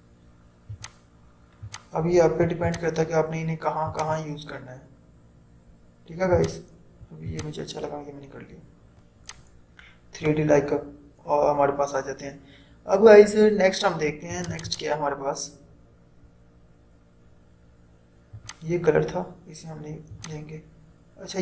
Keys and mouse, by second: 6.3-14.4 drag, 18.5 click.